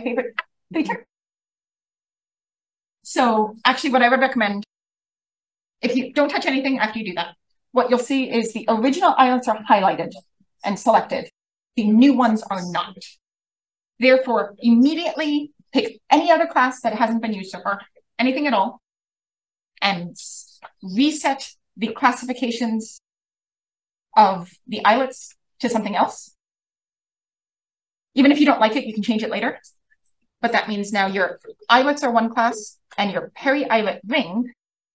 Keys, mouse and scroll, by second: 15.7-18.3 drag, 20.5 click, 27.2 click, 27.9-29.4 scroll up 1, 30.3 drag, 31.2 click, 33.0 click, 33.2 click, 34.3 shift+f.